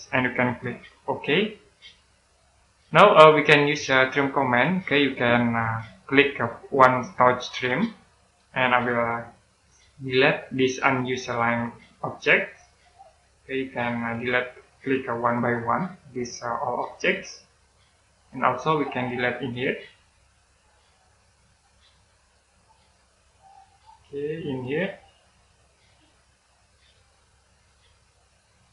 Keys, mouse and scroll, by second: 1.5 click, 2.7-3.3 scroll down 1, 3.3 middle click, 4.4-6.5 scroll down 1, 7.4 click, 8.3-9.3 scroll up 1, 9.8 click, 17.9-18.2 scroll down 1, 18.2 middle click, 18.8-19.4 scroll up 1, 19.4 click.